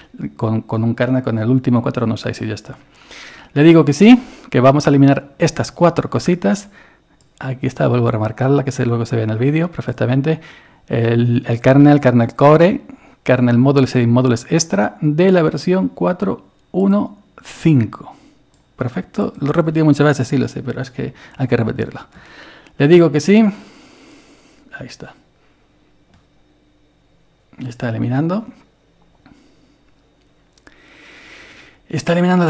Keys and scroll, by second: 22.2 Return.